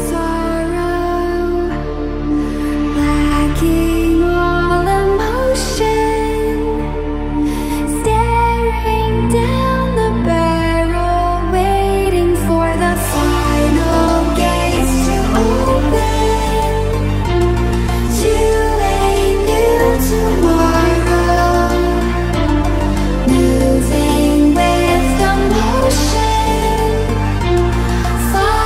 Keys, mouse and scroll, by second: 0.2 click, 4.6 click, 7.6 click, 26.1 click, 26.6 click.